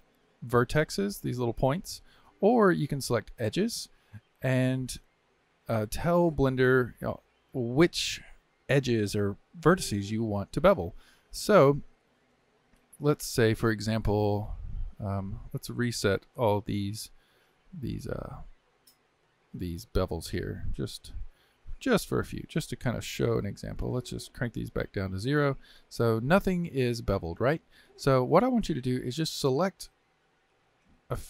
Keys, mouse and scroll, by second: 0.0 shift+click, 1.3 click, 2.1 click, 3.5 click, 5.9 middle click, 6.5 scroll down 1, 6.8-13.3 shift+middle drag, 19.3 click, 20.0 shift+click, 20.7 shift+click, 21.3 shift+click, 22.5 shift+click, 24.8-26.1 drag, 26.1 Tab, 26.7 Tab, 27.4-30.6 middle drag, 30.6 click.